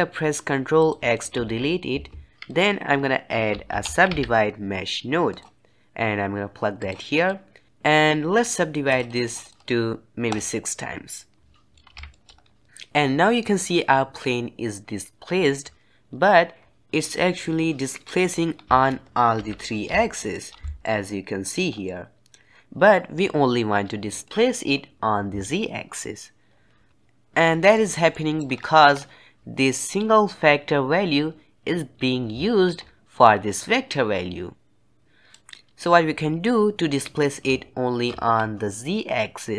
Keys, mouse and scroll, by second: 0.7 click, 1.3 ctrl+x, 2.0 shift+a, 7.2-11.6 drag, 11.6-12.3 middle drag, 12.3-12.6 scroll up 1, 12.6 middle click, 15.4-18.1 middle drag, 18.1-19.3 scroll up 2, 19.3 KP_1, 20.0-20.4 shift+middle drag, 20.4 scroll up 2, 20.6-21.6 shift+middle drag, 21.6 scroll down 2, 21.8-26.9 middle drag, 26.9 scroll down 1, 27.7 middle click, 28.4-29.9 scroll up 5, 29.9-32.4 drag, 32.4 ctrl+right click, 34.5 click, 35.4-35.7 scroll down 1.